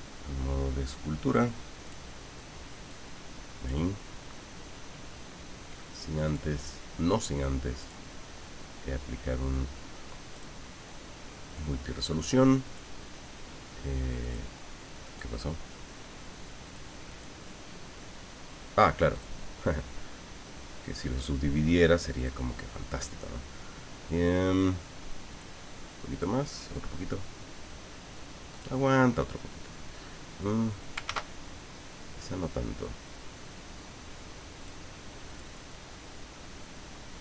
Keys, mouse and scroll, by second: 1.8 click, 2.9 click, 6.2 click, 7.8 click, 10.3 click, 12.6 click, 14.2 click, 15.0 right click, 16.6 click, 17.1 click, 19.1 click, 22.2 click, 25.3 click, 26.1 click, 26.7 click, 28.5 click, 31.0 ctrl+z, 34.5 click, 35.2 click.